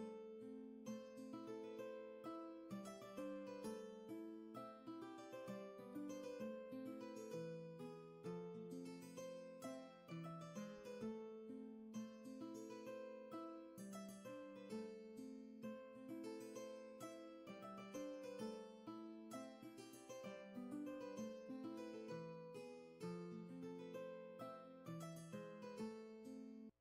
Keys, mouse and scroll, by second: 6.1-7.8 scroll down 1, 7.8-9.5 scroll up 1, 24.6 ctrl+z.